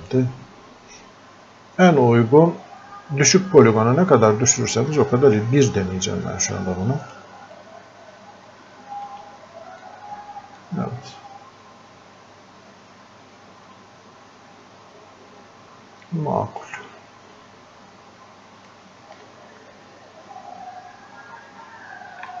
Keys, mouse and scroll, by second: 7.1-9.8 drag, 9.8-17.4 drag, 17.4-22.4 drag.